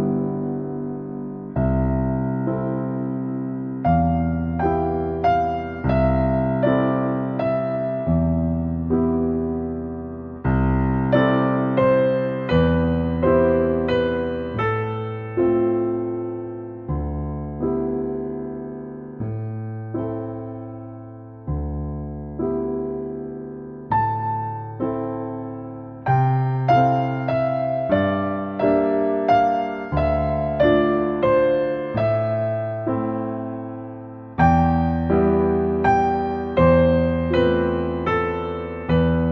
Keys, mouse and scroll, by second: 5.4 shift+a, 7.2-7.8 scroll up 8, 7.5 middle click, 7.8 middle click, 8.5 click, 9.0-10.1 drag, 10.3-12.4 drag, 14.6-16.8 drag, 16.8 scroll down 2, 17.0 shift+middle click, 17.7-18.5 scroll down 1, 18.5 g, 19.4 click, 19.6 shift+a, 21.5 click, 21.8-22.8 drag, 22.8 middle click, 23.7-25.0 drag, 25.0 scroll down 2, 25.1-26.2 middle drag, 26.2 g, 27.9 click, 28.2 shift+a, 29.9-30.9 drag, 31.1-32.3 drag, 32.3 middle click, 33.3-37.6 drag, 38.0 scroll down 3, 38.2-39.3 middle drag.